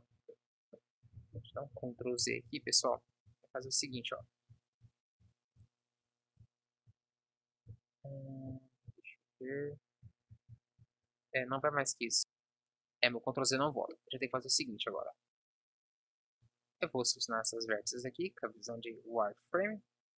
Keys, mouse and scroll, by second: 1.1 ctrl+z, 1.4 ctrl+z, 13.6 KP_1, 16.4 b, 17.5 z.